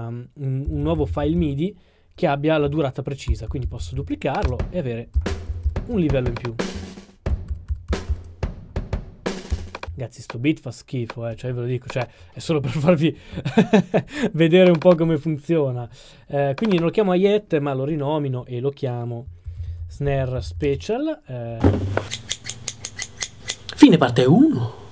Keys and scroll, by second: 3.2 super+d, 7.3 super+d, 19.4-20.5 typing, 20.6 Return.